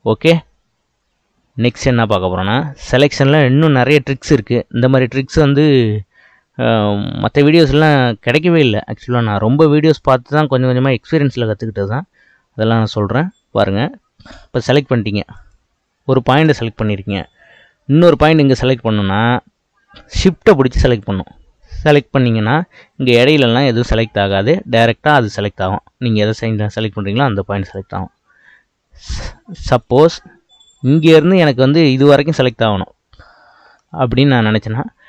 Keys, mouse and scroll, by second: 7.5-10.8 scroll up 2, 14.5 click, 15.3 click, 20.9 shift+click, 26.3 shift+click, 27.6 shift+click, 29.7 click, 30.9 click.